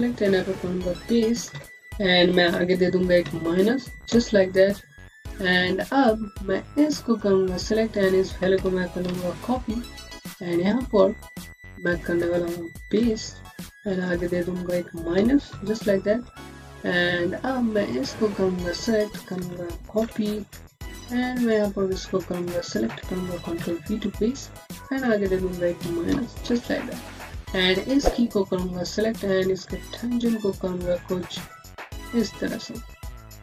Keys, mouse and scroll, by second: 1.4 ctrl+v, 3.9 KP_Enter, 5.1-5.8 scroll down 1, 5.8-6.4 scroll up 1, 6.4 click, 8.9 ctrl+c, 9.5-9.9 scroll down 1, 9.9-10.5 scroll up 1, 10.5 click, 12.8 ctrl+v, 13.9 click, 15.0 KP_Subtract, 15.4 KP_Enter, 16.2-17.2 scroll down 1, 17.2 click, 19.8 ctrl+c, 20.8 click, 23.4 ctrl+v, 24.4 click, 25.6 KP_Subtract, 26.0 KP_Enter, 26.8-27.3 scroll up 1, 27.3 click, 29.4 middle click, 32.7 click, 33.0 scroll down 1.